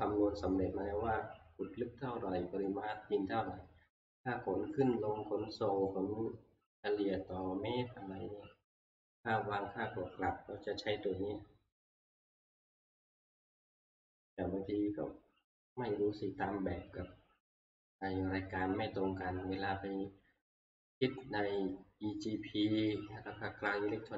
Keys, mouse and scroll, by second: 11.5-11.8 scroll, 13.7-15.0 scroll down 4, 15.0-15.4 scroll up 3, 20.2 scroll.